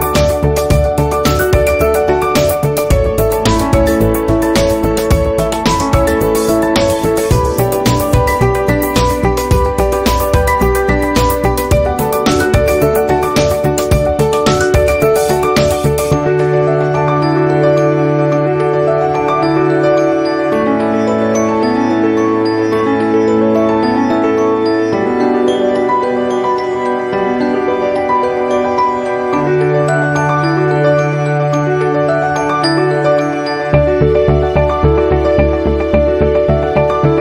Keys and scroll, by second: 2.8 ctrl+z, 3.4 ctrl+z, 4.5 v, 7.3 p, 13.5 v, 16.4 a, 32.0 v.